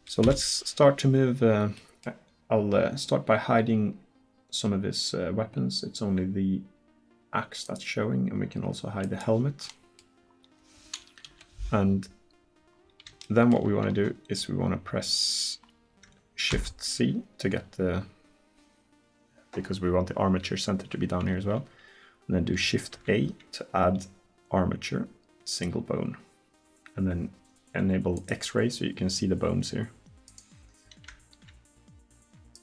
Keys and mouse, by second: 0.3 KP_1, 7.7-11.0 middle drag, 11.3 KP_1, 16.5 shift+c, 23.0 shift+a, 28.2-32.6 drag.